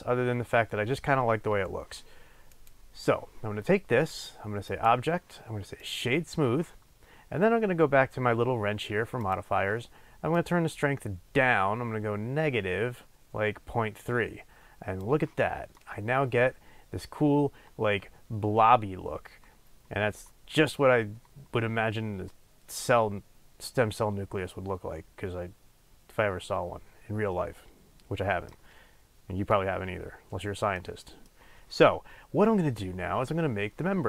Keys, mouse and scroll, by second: 15.7-34.0 middle drag, 28.7-30.7 scroll down 2, 30.7-33.4 scroll down 1, 33.4-34.0 scroll down 1.